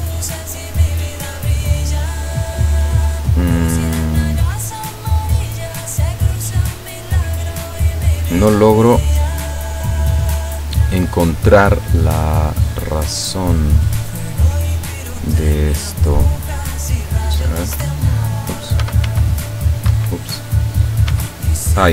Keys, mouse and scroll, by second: 3.5 right click, 4.0 right click, 4.5 right click, 6.5 right click, 13.4 right click, 14.7 right click, 15.8 click, 16.5 click, 17.8 t, 18.9 t, 19.1 r, 20.0 Escape, 20.4 right click, 21.1 r.